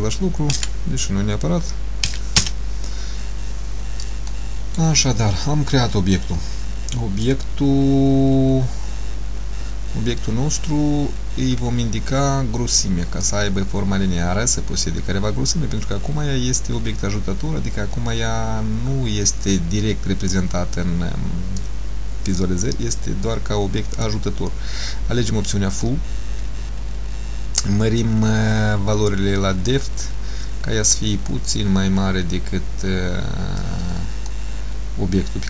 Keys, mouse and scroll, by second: 4.4 shift+middle click, 6.3 middle click, 13.4 click, 27.0-27.6 scroll down 1, 28.0 scroll down 1, 28.1 click, 34.4 middle click.